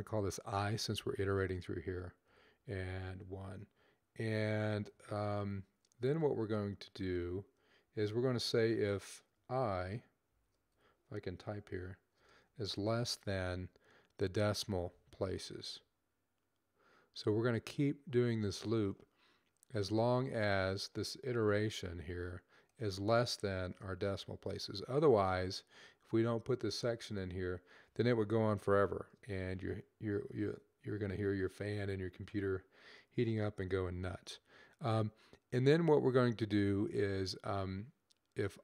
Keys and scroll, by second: 2.1-2.5 typing, 4.3-5.0 typing, 10.3-11.0 typing, 12.7 typing, 21.5 super+c, 24.2 super+v, 28.1 ;, 29.1 ;, 33.1-33.8 typing.